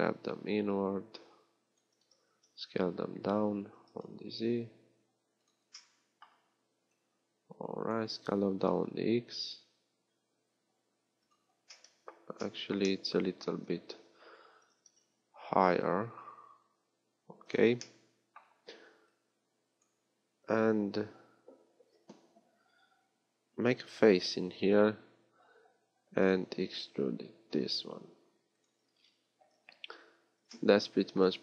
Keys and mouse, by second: 17.6-24.7 drag, 24.7 f, 29.0 click, 29.5 z, 29.8 click, 30.3 z.